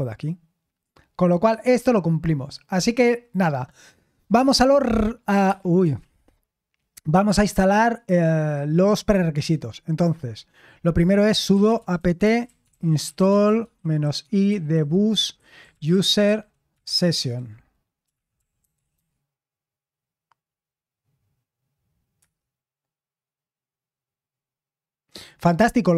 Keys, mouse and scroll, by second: 1.4-4.5 scroll down 1, 4.5 scroll down 1, 4.7 ctrl+l, 5.4 Escape, 5.9 super+l, 11.0-19.4 typing, 22.1 Return.